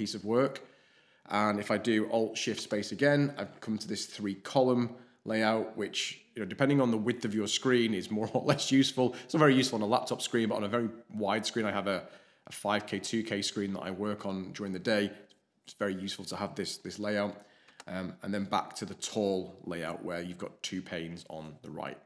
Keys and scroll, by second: 2.5 alt+shift+space, 17.7 alt+shift+space.